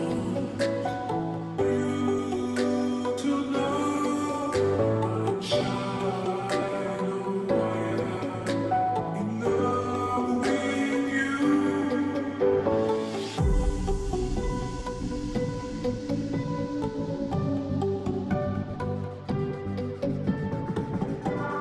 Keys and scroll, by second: 0.0-18.2 typing, 3.3 Return.